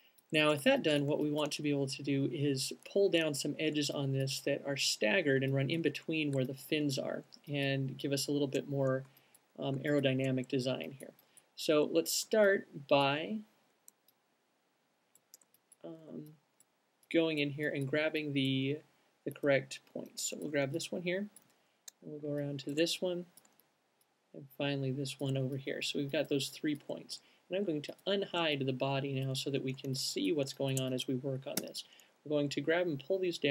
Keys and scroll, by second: 29.1 alt+shift+space, 31.9 w.